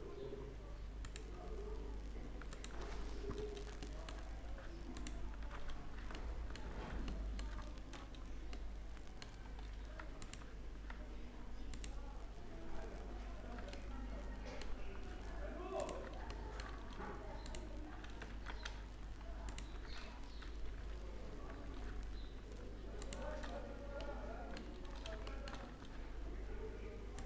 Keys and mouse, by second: 0.9-3.3 drag, 3.3 middle click, 3.4 click, 3.7 middle click, 4.9-6.1 middle drag, 7.0-8.6 middle drag, 8.7 middle click, 9.5 middle click, 10.1-13.4 drag, 13.6-15.4 middle drag, 16.1 middle click, 16.5 middle click, 16.9-18.3 middle drag, 18.3 ctrl+z, 22.7-24.6 middle drag, 26.8 right click, 27.0-27.2 middle drag.